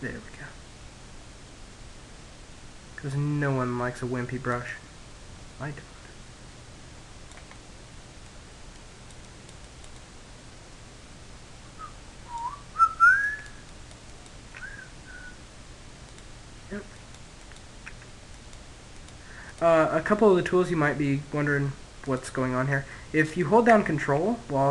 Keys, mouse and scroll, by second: 3.2 click, 4.8 click, 5.9-7.8 middle drag, 7.2-10.4 drag, 11.6-14.2 drag, 14.5-19.6 drag, 18.7-20.2 middle drag, 20.4 click, 21.4-23.0 middle drag, 23.2-24.7 drag.